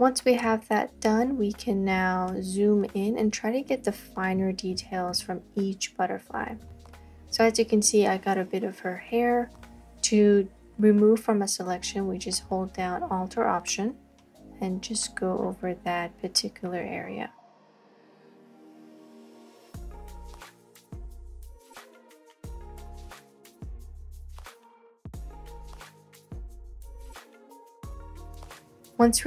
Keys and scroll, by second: 19.6 space, 19.8 space, 19.9 space, 23.3 space, 23.4 space, 23.5 space, 27.6 space, 27.8 space, 27.8 space.